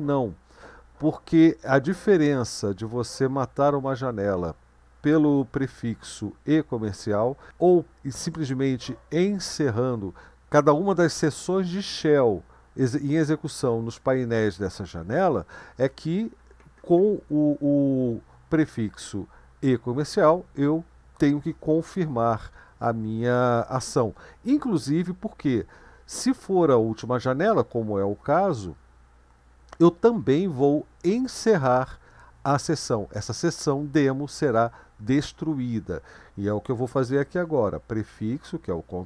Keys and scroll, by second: 38.1 ctrl+b.